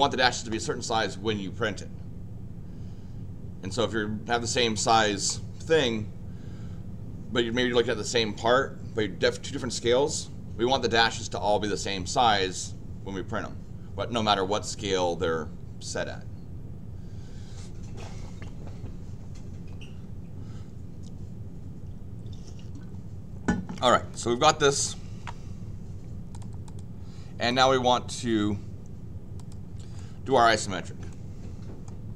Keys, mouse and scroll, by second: 24.1 click, 24.6 click, 26.3 click, 26.6 click, 27.5 click, 29.3 click, 29.9 middle click, 30.6 scroll down 2, 31.1 middle click, 31.9 scroll down 1, 31.9 middle click.